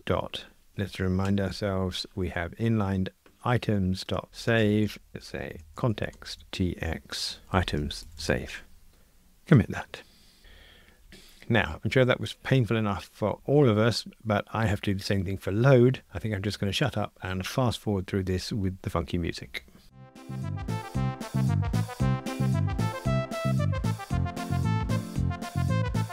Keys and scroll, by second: 1.5 super+d, 20.3 super+b, 20.6 super+[, 20.8 super+d, 21.2 Escape, 22.6 Escape, 22.9 super+F9, 23.6 Escape, 23.7 super+F9, 24.0 super+F9, 24.2 alt+Return, 24.7 super+c, 24.8 super+v, 24.9 alt+shift+Left, 25.1 Return, 25.6 Return, 25.9 Return.